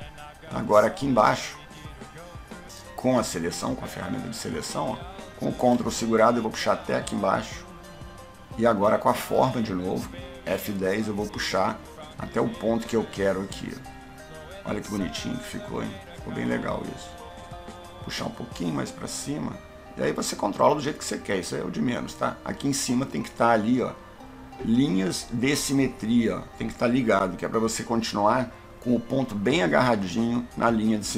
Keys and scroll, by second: 9.0 F10.